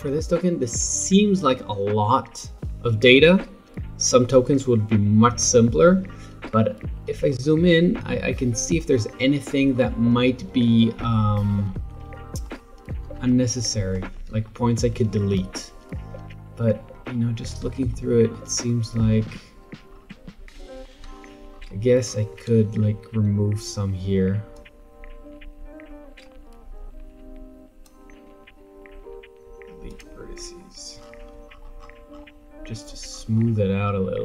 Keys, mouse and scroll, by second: 7.3-8.3 alt+scroll up 6, 8.3-9.9 scroll up 17, 10.7 middle click, 10.7-11.9 scroll down 7, 11.9 alt+middle drag, 13.3-15.3 shift+middle drag, 15.3-16.5 scroll up 7, 15.4 middle click, 17.0-17.9 scroll down 7, 17.9-18.6 shift+middle drag, 18.6-19.9 scroll up 3, 19.9-21.1 scroll down 5, 21.1-22.2 shift+scroll up 11, 24.5 click, 28.4 x, 30.9-33.1 scroll down 20, 33.1-34.2 scroll up 7.